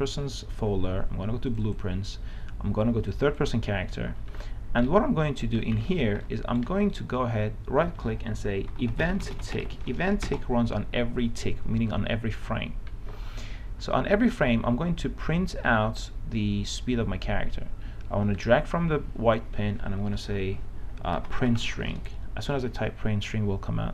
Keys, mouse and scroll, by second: 2.4 click, 5.1-7.2 right drag, 8.8-10.5 typing, 12.1-19.7 drag, 21.2-22.4 typing.